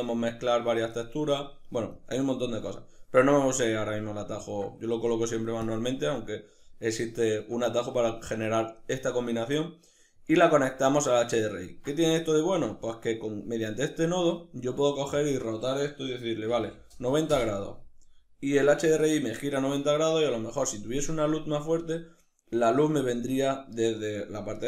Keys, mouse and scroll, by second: 0.9 right click, 1.6 click, 3.8-5.3 ctrl+middle drag, 5.3 click, 6.7-14.8 ctrl+middle drag, 14.8-24.6 drag, 17.0 Return.